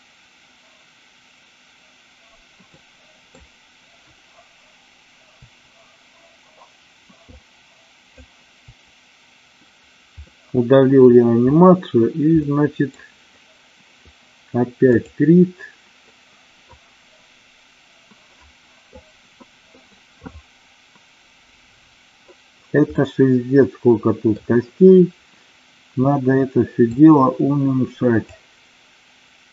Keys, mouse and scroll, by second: 2.8-3.4 middle drag, 5.4 Delete, 7.2-8.1 drag, 8.6 Delete, 10.2-11.0 middle drag, 12.5-12.9 middle drag, 15.0-21.4 drag, 23.1-24.4 middle drag, 26.9-29.5 drag.